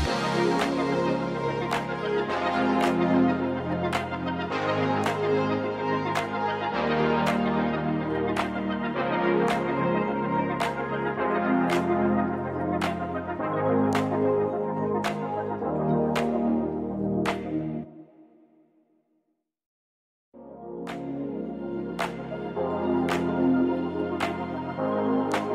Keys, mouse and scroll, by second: 2.6 scroll up 1, 3.3-4.7 scroll down 1, 4.7 click, 5.4-6.2 scroll up 3, 6.2-8.6 drag, 10.1-12.1 scroll down 6, 14.6 KP_0, 15.6 scroll down 2, 17.0 click, 18.1 click, 18.8-19.6 scroll up 1, 19.6-20.5 drag, 22.8-25.5 drag.